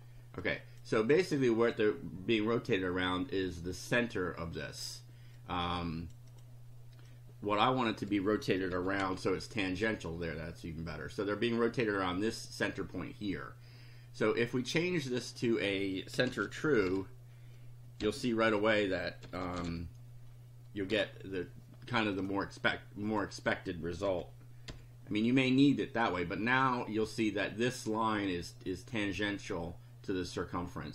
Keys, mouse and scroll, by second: 0.5 click, 1.4 click, 5.4 click, 7.1 click, 8.7 5, 9.0 F5, 9.6 click, 10.3 click, 15.2 click, 15.9-20.2 typing, 20.9 F5, 22.2 click, 23.1 click, 24.1 ,, 24.7 F5, 25.6-26.8 drag.